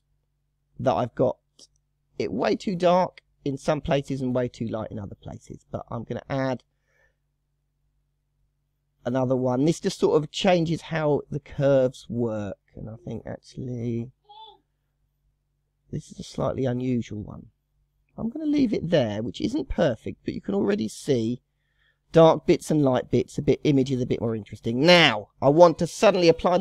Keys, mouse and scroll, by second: 0.3 scroll down 2, 4.9-13.3 drag, 14.3-20.0 drag, 20.0-20.7 scroll down 2, 20.7-25.1 middle drag, 25.1-26.0 scroll down 1, 26.0-26.6 scroll down 2.